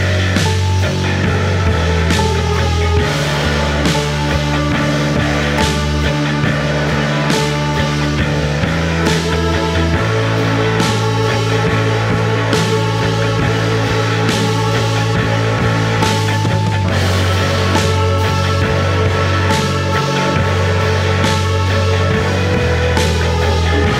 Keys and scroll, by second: 10.2 ctrl+d, 10.4 Escape.